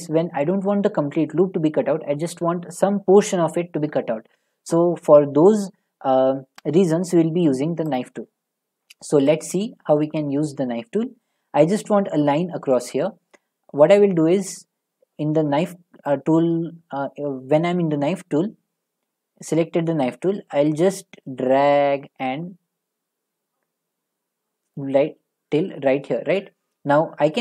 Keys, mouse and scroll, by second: 8.0-11.1 drag, 11.2-14.4 middle drag, 24.8-27.4 drag.